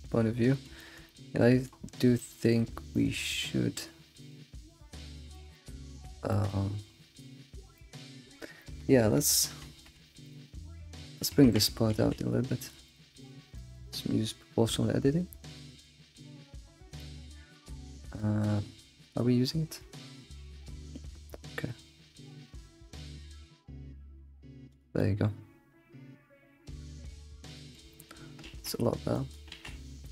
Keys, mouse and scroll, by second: 5.6 alt+middle drag, 5.9 alt+shift+z, 6.3 shift+middle drag, 6.6-7.5 scroll up 5, 6.7 alt+shift+z, 7.5 scroll down 3, 7.8-9.7 middle drag, 9.7 alt+shift+z, 10.0 alt+shift+z, 10.3 click, 11.1 click, 11.5 Tab, 11.9 alt+x, 12.6 click, 12.9 shift+click, 13.4 alt+x, 13.6 middle click, 15.8 click, 16.7 g, 16.8 g, 18.5 g, 18.8 g, 25.0-28.5 middle drag, 28.5 alt+x, 29.1 click, 29.5 alt+x, 30.0 middle click, 30.0 click.